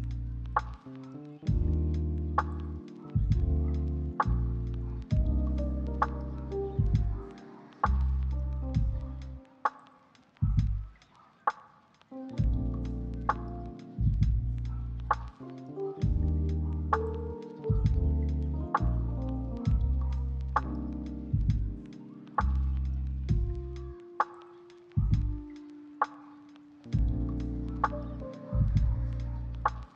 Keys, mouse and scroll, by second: 0.4 middle click, 0.9 double click, 1.6 middle click, 2.0 shift+middle click, 2.2 ctrl+middle click, 2.5 double click, 3.1 middle click, 3.4 middle click, 3.5 shift+middle click, 4.3 double click, 4.7 middle click, 5.1 double click, 5.5 middle click, 6.1 double click, 6.4 middle click, 6.9 shift+middle click, 7.7 shift+middle click, 8.1 double click, 9.1 shift+middle click, 9.4 middle click, 9.7 shift+middle click, 10.2 double click, 10.8 middle click, 11.5 double click, 13.4 middle click, 14.1 double click, 14.5 middle click, 14.7 double click, 15.3 ctrl+middle click, 15.5 shift+middle click, 15.7 middle click, 15.9 ctrl+middle click, 16.6 shift+middle click, 17.0 s, 17.1 right click, 18.2 double click.